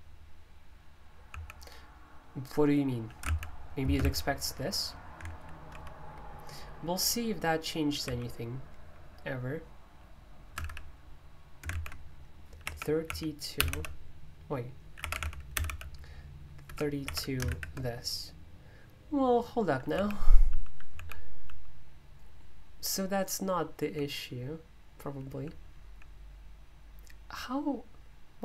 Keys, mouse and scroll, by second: 1.2 typing, 3.2 ctrl+F6, 3.8 space, 4.0 k, 5.7 alt+super+o, 8.0 super+o, 10.5 Escape, 10.6 typing, 11.7 super+u, 12.4-17.5 typing, 19.9-21.4 typing, 23.8-24.3 typing, 25.4-25.8 typing.